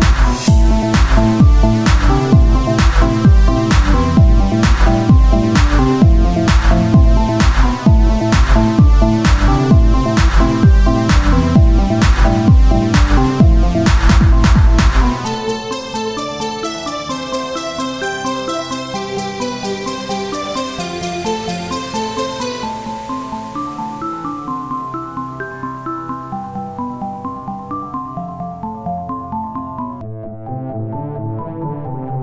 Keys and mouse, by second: 0.1 Tab, 4.5 Tab, 6.1 a, 7.7 e, 10.3-13.1 drag, 13.9-19.0 drag, 20.1 Tab, 22.3 Tab, 22.5 a, 23.2 ctrl+n, 23.5 Tab, 25.5 Tab, 25.9 KP_1, 26.6 z, 28.4 z.